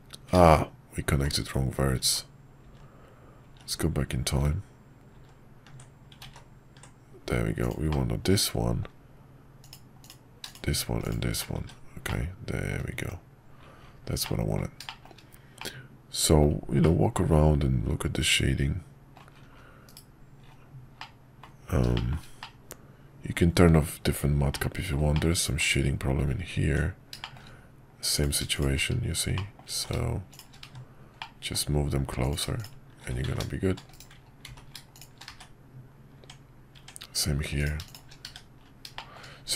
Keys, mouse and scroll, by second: 0.9 ctrl+z, 1.6 ctrl+z, 2.6-5.8 ctrl+z, 7.9 middle click, 10.5 shift+click, 12.1 middle click, 12.9 Tab, 14.2 middle click, 14.8 shift+middle click, 15.6-16.4 middle drag, 16.8-19.2 middle drag, 21.0-21.4 middle drag, 21.9 middle click, 22.4-23.7 middle drag, 24.5 middle click, 25.1 middle click, 26.6 Tab, 27.2 middle click, 28.1 click, 29.3 middle click, 29.8 ctrl+z, 30.7 1, 31.2 middle click, 33.2 z, 34.5 ctrl+z, 35.4 1, 36.2 Tab, 38.3 1, 38.9 shift+middle click.